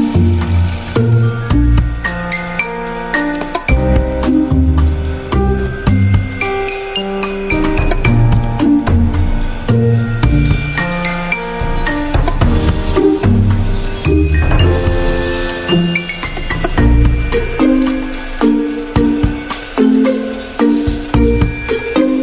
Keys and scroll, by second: 20.8 ctrl+shift+].